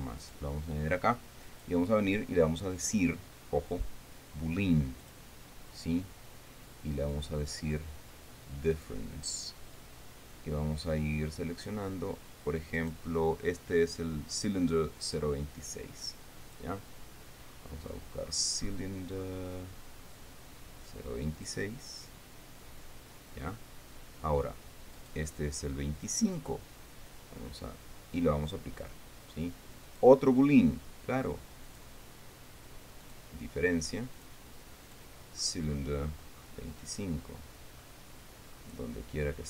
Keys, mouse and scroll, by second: 0.8 right click, 2.0 click, 5.6 click, 7.6 click, 9.3 click, 13.3 right click, 15.6 right click, 17.0 click, 17.9-19.5 scroll down 5, 19.7-20.8 scroll down 6, 21.9 click, 25.5 right click, 26.6 right click, 29.0 click, 30.4 click, 30.7-32.2 middle drag, 32.2 click, 33.6 click, 34.7 click, 35.4 click, 35.8-36.2 scroll down 1, 36.6-37.2 scroll down 2, 37.5-38.2 scroll down 1, 38.4 scroll down 1, 39.0-39.4 scroll down 6.